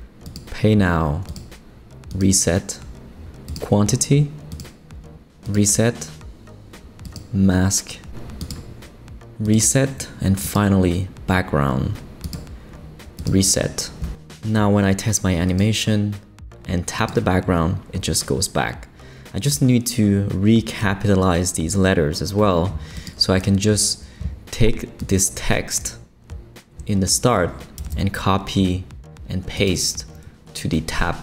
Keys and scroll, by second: 27.8 super+c.